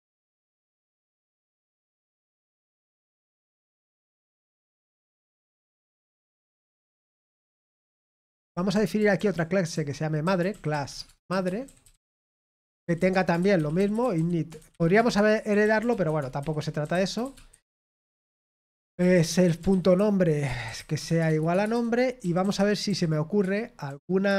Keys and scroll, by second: 8.4-24.3 typing.